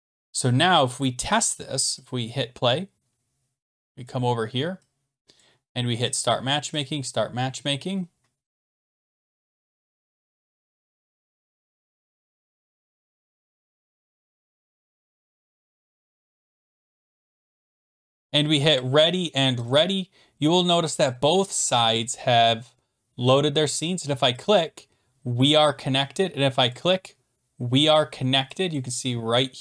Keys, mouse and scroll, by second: 2.1 click, 4.2 click, 5.4 click, 6.1 click, 6.8 click, 18.9 click, 19.7 click, 21.1 click, 22.0 click, 24.4 click, 26.7 click, 28.7 click.